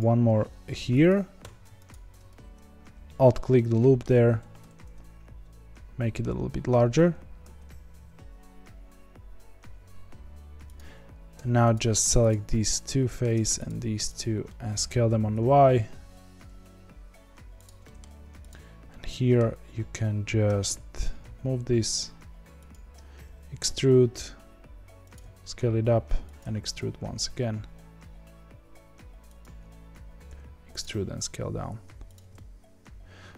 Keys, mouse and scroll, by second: 1.4 3, 1.8 alt+click, 3.2-4.3 middle drag, 4.3 s, 7.9 s, 11.7 click, 12.6-13.6 middle drag, 13.6 shift+click, 14.1 shift+click, 14.4 middle click, 15.0 s, 17.8 middle click, 18.4 click, 18.9-20.4 middle drag, 20.4 g, 22.9 e, 25.1 s, 26.4 e, 30.2 e, 30.8 s, 32.3-33.3 middle drag.